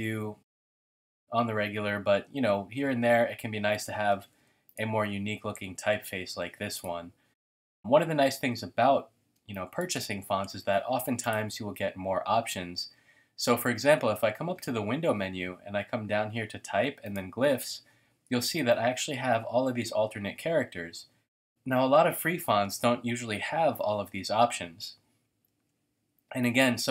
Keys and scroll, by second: 4.0 shift+super+a, 4.3 v, 9.3 space, 9.8 space, 25.6 t.